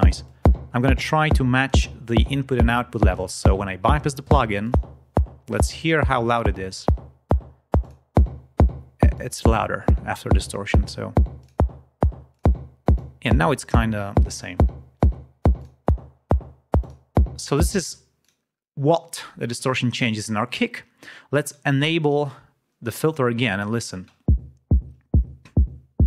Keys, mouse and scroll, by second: 0.1-1.8 drag, 4.5 click, 7.7 click, 9.0-10.6 drag, 11.3 click, 12.2 click, 12.8 click, 15.5 click, 16.7 click, 17.7 space, 18.1 click, 21.9 click, 23.7 click, 23.9 space.